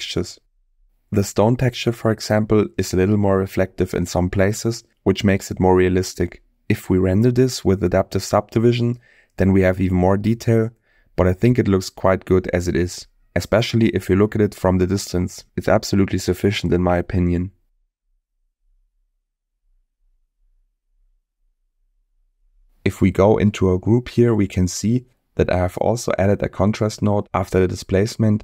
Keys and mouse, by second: 11.8 middle click, 13.8-15.4 middle drag, 17.4 middle click, 20.4-21.8 middle drag, 24.1 click, 25.0 middle click.